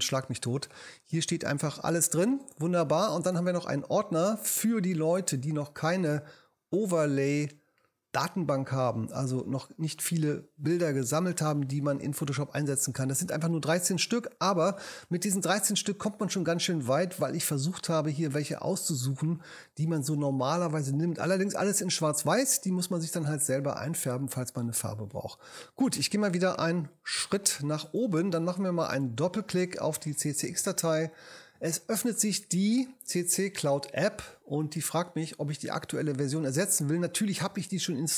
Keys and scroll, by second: 1.1 space, 26.5 super+Up.